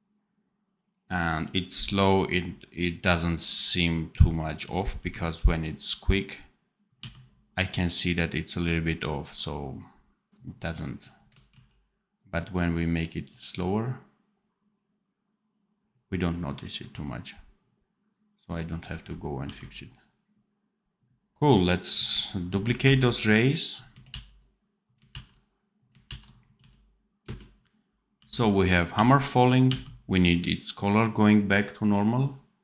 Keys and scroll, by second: 2.2 d, 4.5 d, 6.9 d, 11.4 ctrl+z, 19.3 d, 22.7 ctrl+c, 24.0 ctrl+v, 25.1 ctrl+v, 26.5 d, 27.1 space, 28.1 d.